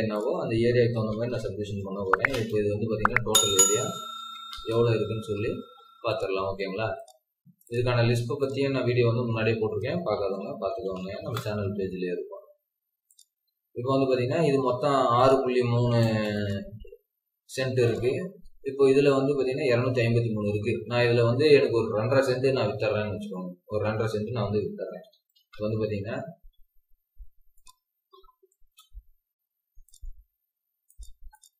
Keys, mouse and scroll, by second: 0.3 Escape, 0.9-2.5 typing, 3.4 Escape, 3.9-4.3 typing, 9.2-10.0 scroll up 1, 9.8-10.9 typing, 15.9 typing, 16.6-17.4 scroll down 1, 17.4 typing, 18.2 Escape, 18.2 scroll up 1, 24.6-25.5 typing, 31.3 double click.